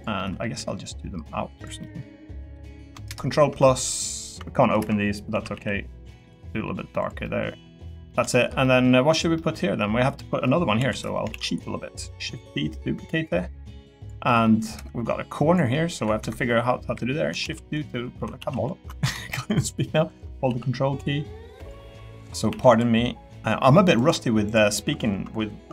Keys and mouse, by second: 0.2 middle click, 0.5 e, 1.5 click, 1.8 middle click, 5.3 a, 5.5 g, 6.2 click, 7.2 middle click, 7.8 middle click, 8.1 middle click, 8.3 shift+middle click, 8.6 middle click, 9.3 middle click, 10.8 click, 10.8 l, 11.3 shift+d, 11.4 click, 12.1-13.8 drag, 14.2 middle click, 16.8 KP_7, 17.4 shift+d, 18.1 r, 18.4 z, 20.5 g, 21.6 click, 21.8 middle click, 22.5 3, 23.0 middle click, 23.9 click, 24.5 ctrl+click.